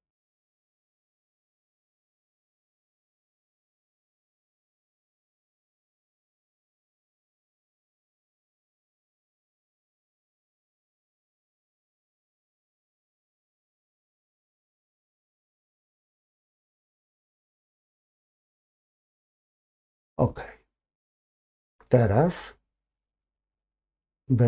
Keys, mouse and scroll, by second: 5.9-10.9 drag, 14.0 ctrl+KP_Subtract, 16.1 x, 18.3-23.7 middle drag, 23.7-24.4 scroll up 1.